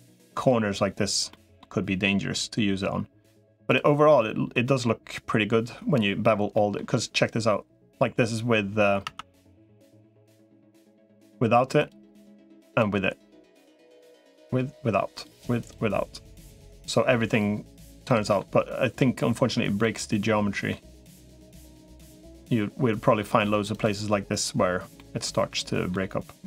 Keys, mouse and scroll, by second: 1.1 middle click, 1.2 click, 3.9 middle click, 6.4 middle click, 8.8 Tab, 11.6 click, 15.0 click, 16.5 middle click, 17.9 middle click, 19.6 middle click, 21.9-23.0 shift+middle drag, 23.8 click, 24.8 middle click.